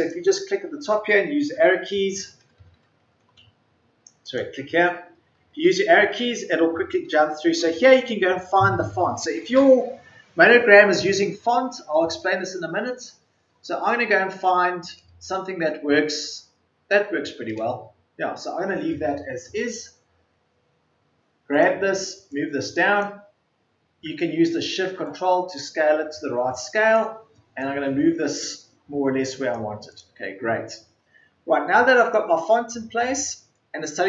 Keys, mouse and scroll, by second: 1.2 Down, 1.5-2.1 typing, 5.4 Down, 5.8-6.5 typing, 16.8-17.5 typing, 21.5 typing, 23.2-24.0 typing.